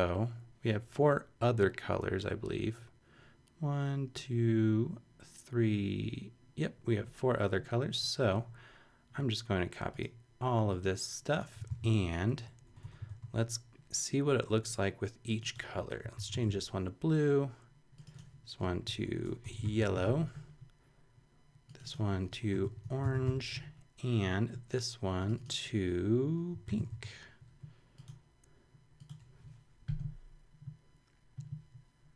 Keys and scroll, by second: 11.7 shift+super+c, 12.3 super+Right, 12.7 Return, 13.1 super+v, 15.9-16.9 typing, 18.8-20.5 typing, 22.3-23.7 typing, 26.3-27.4 typing.